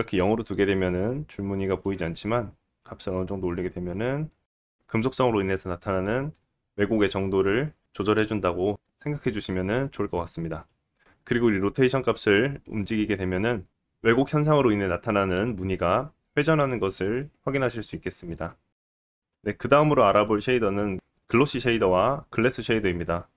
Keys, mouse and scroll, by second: 0.8 middle click, 5.4 middle click, 18.7-19.2 scroll down 1, 19.5 shift+a, 21.1-23.3 shift+middle drag, 21.5 shift+a.